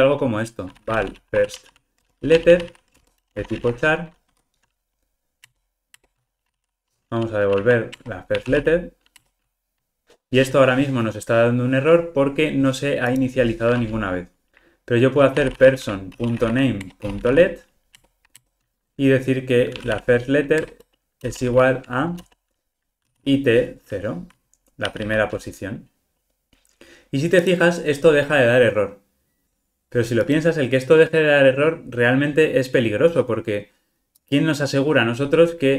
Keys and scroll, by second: 4.3 Escape, 8.7 Return, 14.5 super+z, 16.9 Return.